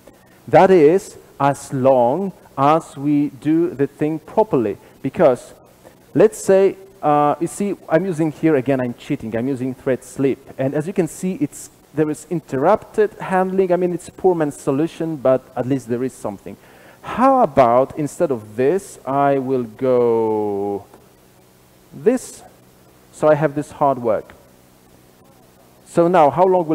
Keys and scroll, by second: 20.4 super+/.